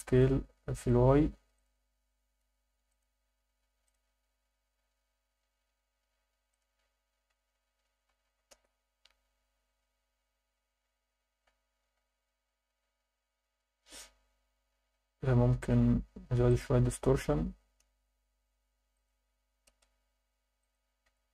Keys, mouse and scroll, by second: 0.7-1.6 drag, 2.9-4.0 drag, 6.5-8.5 drag, 8.2 0, 9.7-10.6 scroll down 5, 11.3-12.5 scroll up 4, 14.9 scroll up 2, 16.5-17.9 drag, 18.9 click, 20.6 click.